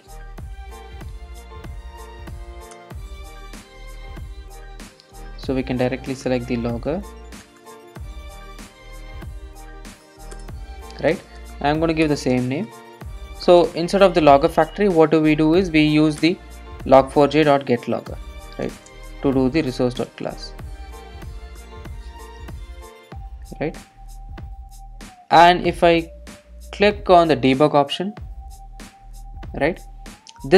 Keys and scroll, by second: 10.4 Return, 16.3 Return, 23.3 Return, 24.2 super+s, 26.7 ctrl+d.